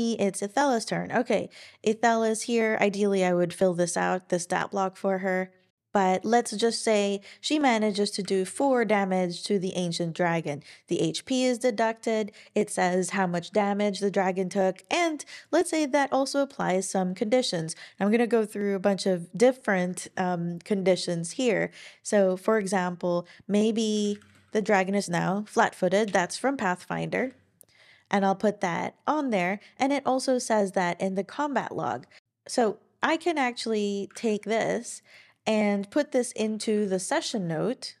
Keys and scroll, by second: 8.4 Return, 23.9-24.8 typing, 26.0 Return, 32.2 super+a, 32.2 super+c, 34.1 super+a, 34.5 super+c, 36.4 Return, 36.6 Return, 36.8 shift+1, 37.2 super+v.